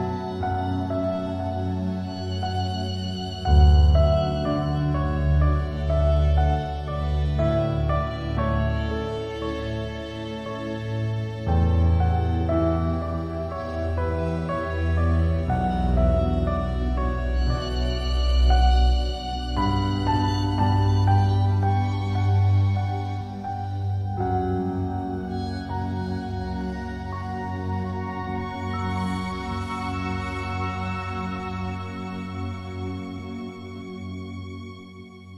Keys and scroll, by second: 2.1 ctrl+y, 3.1 ctrl+0.